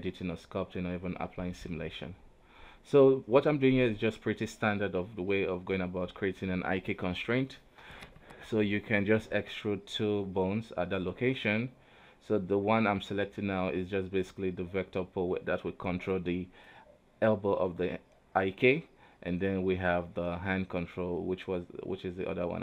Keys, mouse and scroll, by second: 0.4 shift+middle click, 0.7 scroll up 1, 0.9 alt+a, 1.2 right click, 2.7 shift+right click, 3.2 ctrl+z, 4.1 e, 4.5-6.8 drag, 6.8 right click, 7.6 alt+p, 10.3 right click, 10.6 e, 11.3 click, 12.2 right click, 13.0 alt+p, 16.8-18.1 scroll down 1, 18.1-19.6 drag, 19.6-20.6 middle drag, 20.6 KP_3, 21.0 Tab, 22.0-22.6 middle drag.